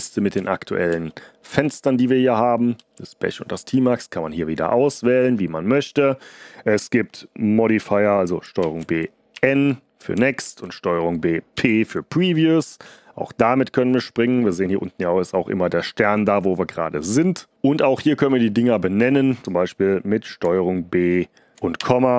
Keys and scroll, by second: 0.3 Up, 0.8 Down, 1.4 Up, 2.7 End, 5.8 Return, 8.5 ctrl+b, 9.3 n, 10.4 ctrl+b, 11.5 p, 21.5 ctrl+b, 21.7 ,.